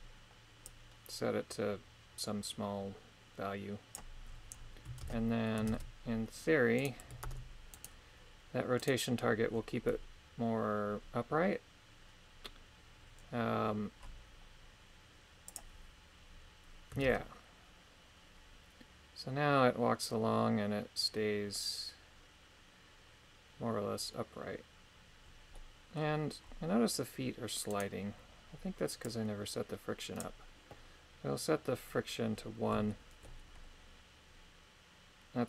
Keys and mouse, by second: 0.6-3.9 drag, 5.0 shift+space, 5.7 shift+space, 6.8 right click, 7.2 ctrl+Tab, 7.7 right click, 8.8 right click, 15.5 click, 17.1 shift+space, 25.6-27.7 middle drag, 27.7 right click, 29.1-30.3 drag, 32.9 shift+middle click.